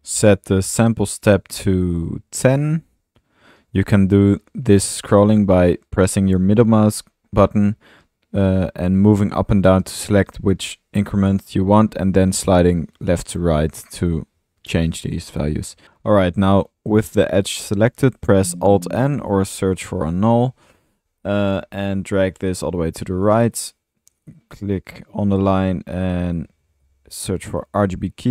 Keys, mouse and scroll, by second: 0.9-3.5 middle drag, 14.2-15.8 middle drag, 15.6-16.3 typing, 16.1 click, 18.3 alt+n, 18.7-20.8 typing, 19.0 alt+click, 21.6 drag, 21.9-22.4 middle drag, 24.1-24.4 right drag, 25.6 right click, 26.0-27.3 typing, 27.7-28.0 drag.